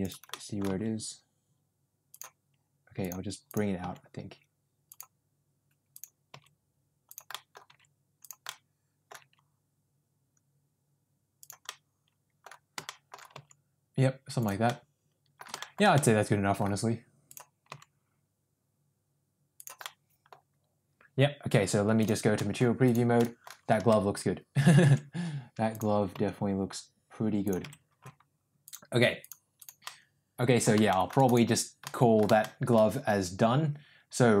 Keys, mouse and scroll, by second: 0.2 middle click, 0.6 g, 3.0 click, 3.7 g, 6.2 g, 7.2 middle click, 7.6 g, 8.4 middle click, 9.1 g, 11.6 middle click, 12.8 shift+middle click, 13.2 g, 14.6 middle click, 15.6 middle click, 15.8 middle click, 17.6 g, 19.9 middle click, 22.4 middle click, 22.8 click, 23.1 middle click, 23.8 Tab, 24.8 Tab, 25.6 click, 26.0 g, 27.6 Tab, 28.5 click, 29.8-30.5 middle drag, 30.8 shift+middle click, 31.1 drag, 31.8 middle click, 32.4 shift+middle drag.